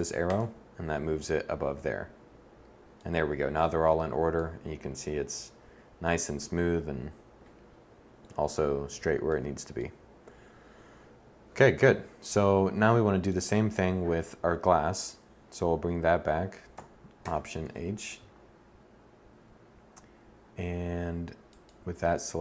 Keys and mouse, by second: 4.2 middle click, 11.7 KP_1, 16.7 alt+h.